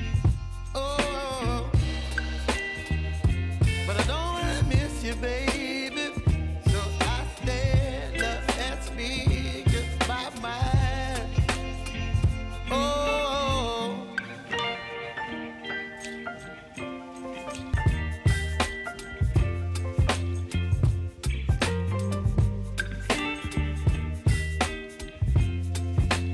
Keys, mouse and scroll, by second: 1.0 Return, 1.5 click, 2.1 ctrl+d, 2.4 r, 3.2 click, 4.4 Return, 4.9 click, 5.4 ctrl+d, 5.8 r, 6.5 click, 7.6 Return, 8.6 click, 8.8 right click, 9.7 click, 12.3 shift+click, 14.7 s, 15.3-19.0 drag, 19.0 space, 21.8 click, 22.9 space, 25.1 space, 25.7 click.